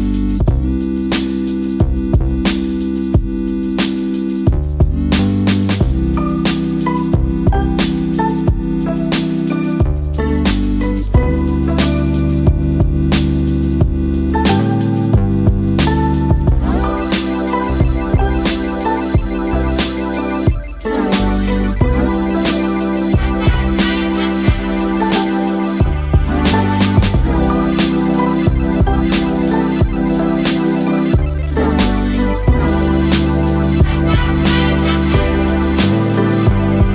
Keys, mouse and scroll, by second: 4.6 right click, 5.7 right click, 6.9 click, 9.5 click, 10.8 space, 15.1 click, 16.2 alt+scroll up 1, 18.4-29.1 drag, 29.1 alt+scroll up 1, 30.1-36.9 drag.